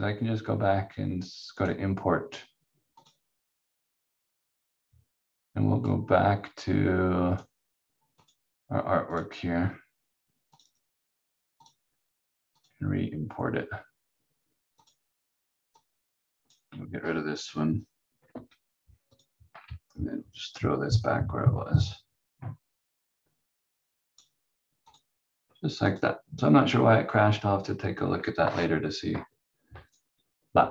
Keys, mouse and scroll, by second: 18.3 Delete, 19.1 click, 19.5 scroll down 1, 20.5 click.